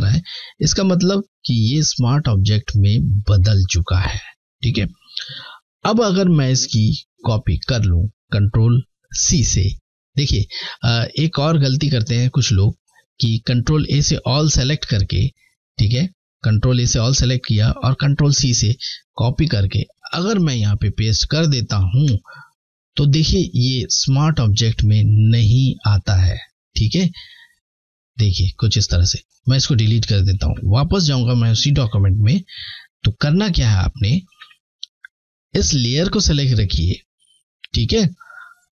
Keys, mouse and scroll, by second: 7.9 ctrl+Num_Lock, 13.9 a, 17.7 ctrl+c, 19.3 click, 19.7 click, 21.0 ctrl+v, 25.1 click, 29.8 Delete, 29.8 typing, 30.7 click, 32.6 typing, 33.3 ctrl+d, 34.6 click, 37.1 typing.